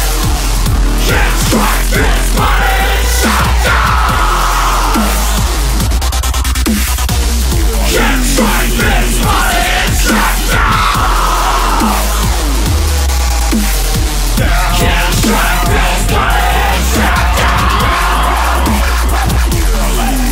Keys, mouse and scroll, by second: 3.1-16.8 drag.